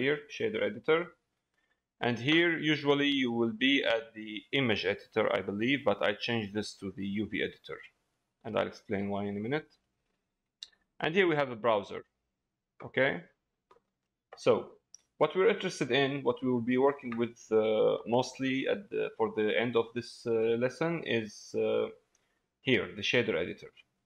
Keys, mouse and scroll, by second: 2.8-5.2 drag, 6.3 click, 8.6 middle click, 15.9 click, 18.0 shift+middle click, 18.5-19.6 middle drag, 20.0 shift+middle click, 21.0 middle click.